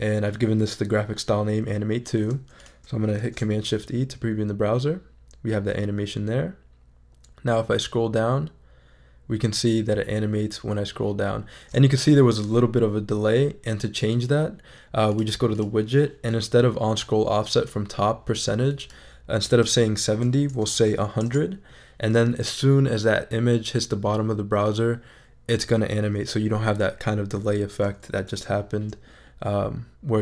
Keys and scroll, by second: 3.2 shift+super+e, 20.5 0, 21.2 Return, 28.3 shift+super+e.